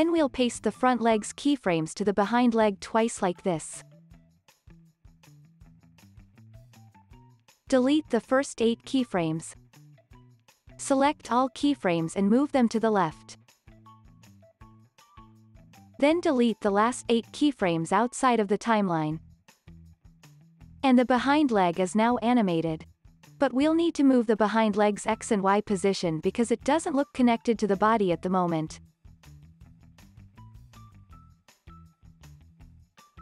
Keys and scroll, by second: 1.3 super+v, 5.1 super+v, 6.2 super+v, 9.4 Delete, 14.9 alt+q, 18.1 c.